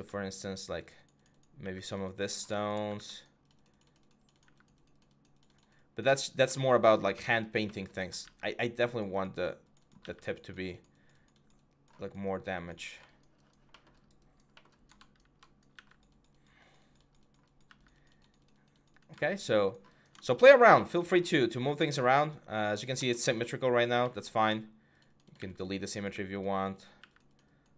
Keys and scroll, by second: 1.4 x, 2.6 x, 4.2 x, 8.0 x, 15.5 x, 25.1 x, 26.7 typing.